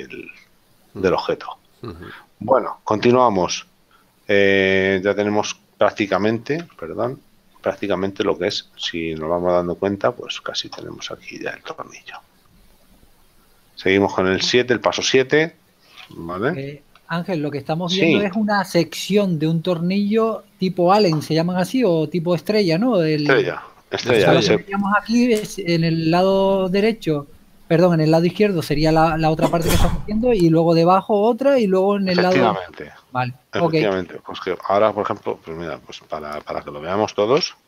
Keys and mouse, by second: 2.1 click, 7.4 KP_7, 8.1 shift+middle click, 11.8 shift+middle click, 14.8 click, 17.1 KP_Decimal, 34.9 Tab, 37.5 a.